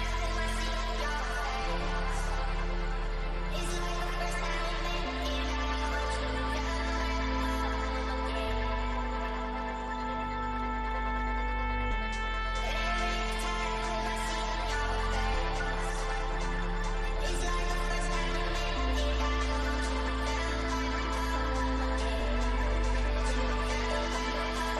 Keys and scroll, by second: 2.7 F2, 6.6 F2, 8.9 ctrl+r, 9.5 Escape, 10.6 F3, 10.7 Delete, 17.4 Escape, 20.1 shift+F2, 22.0 F9, 24.2 Escape.